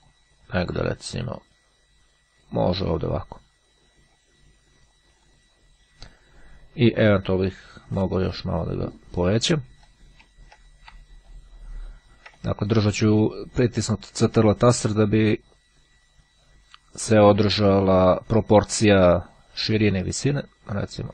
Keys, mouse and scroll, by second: 0.1 click, 1.0-5.9 drag, 9.0 click, 10.9-21.1 shift+drag.